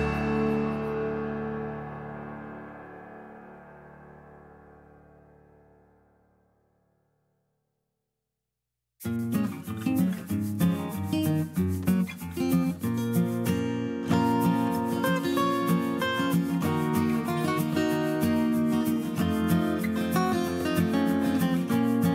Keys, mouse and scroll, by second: 0.1 F2.